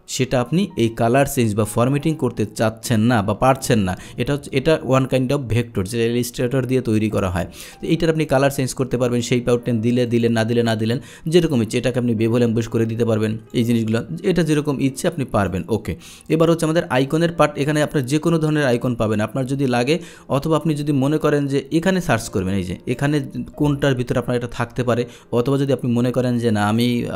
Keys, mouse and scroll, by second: 0.2-7.2 drag, 9.0 click, 10.2 click, 11.5 click, 13.5 click, 15.5 click, 17.1 click, 22.3 click, 24.2-25.1 middle drag.